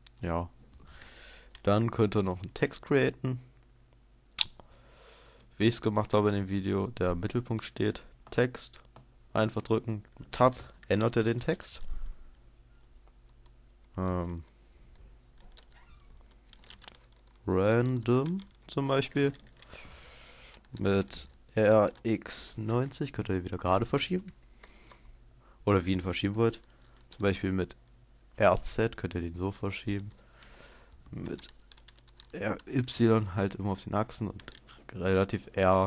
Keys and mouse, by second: 0.0 Escape, 2.4 shift+a, 9.0 click, 10.0 Tab, 10.5 click, 11.2 BackSpace, 11.4-15.0 BackSpace, 16.6 shift+r, 16.8 a, 16.9 n, 17.8 d, 18.6 Tab, 21.2 r, 23.2-24.6 drag, 24.8 KP_0, 26.5 middle click, 28.4 r, 32.4 r.